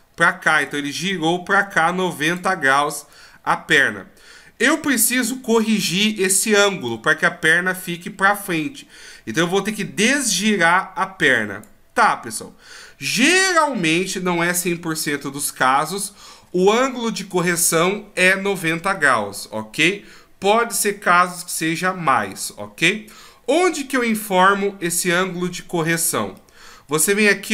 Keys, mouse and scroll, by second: 0.6 d, 0.7 click, 2.4-3.1 d, 6.9 d, 9.2 d, 9.4 click, 11.6-12.1 d, 14.3 d, 14.4 d, 14.5 d, 26.4 middle click.